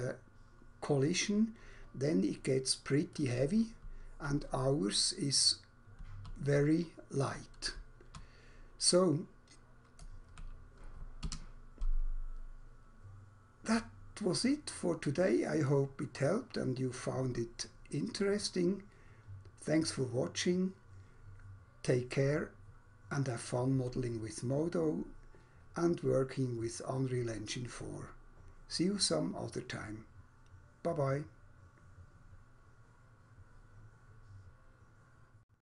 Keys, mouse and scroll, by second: 3.2 right click, 3.8-4.2 w, 4.3 w, 5.5-6.0 typing, 7.6-8.3 typing, 10.0-10.3 typing, 11.3 Escape, 13.8 right click, 15.6 right click.